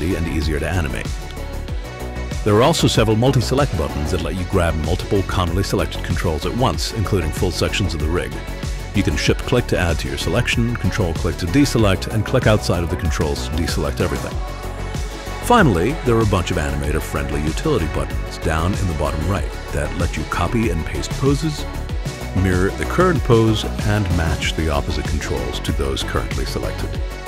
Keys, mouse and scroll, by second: 3.7 click, 5.3 click, 6.3 click, 7.7 click, 9.9 shift+click, 11.0 ctrl+click, 12.3 ctrl+click, 13.7 click, 14.6 alt+click, 15.6 click, 17.1 click, 18.2-20.0 drag, 20.8 click, 22.9 click, 23.5 click, 24.5 click, 27.1 click.